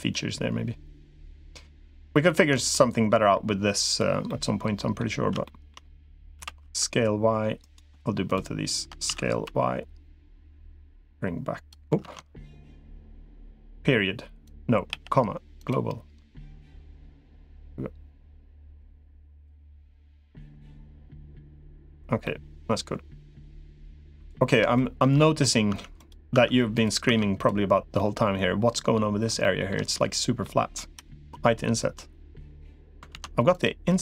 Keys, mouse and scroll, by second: 2.1 Tab, 2.5 middle click, 4.1 middle click, 5.2 shift+middle click, 6.1 s, 8.9 s, 10.9 click, 12.1 ctrl+z, 14.7 ., 14.7 ,, 16.7-18.7 drag, 19.5-21.7 middle drag, 22.0-23.6 middle drag, 24.6 shift+middle click, 24.9 middle click, 25.5 Tab, 26.1 Tab, 26.9 Tab, 27.8-29.1 middle drag, 29.2 middle click, 30.2 middle click, 31.1 i, 32.9 ctrl+z, 33.3 click.